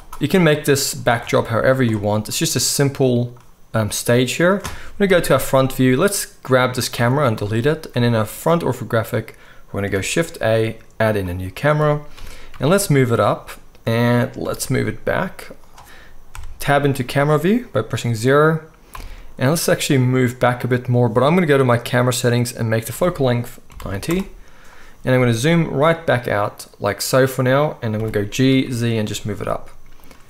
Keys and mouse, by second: 0.3-12.6 right drag, 1.1 Tab, 5.1 KP_1, 6.9 x, 9.9 shift+a, 12.1 g, 12.6-19.3 middle drag, 14.4 g, 16.3 KP_0, 18.9 g, 19.3-21.8 right drag, 21.8 middle click, 21.9 right click, 22.6-27.4 middle drag, 23.2-25.4 drag, 23.2-25.4 right drag, 25.2 g, 27.4-30.2 right drag, 28.0 g.